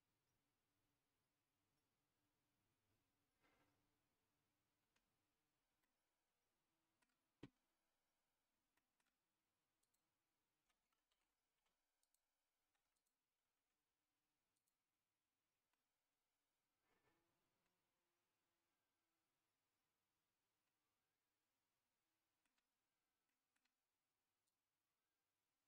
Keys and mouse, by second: 5.8-7.0 middle drag, 8.7 middle click, 9.8-10.9 drag, 11.1 ctrl+z, 12.0 click, 12.9 shift+click, 14.5-15.7 drag, 15.7-22.4 middle drag, 23.2 middle click, 24.5-25.6 drag.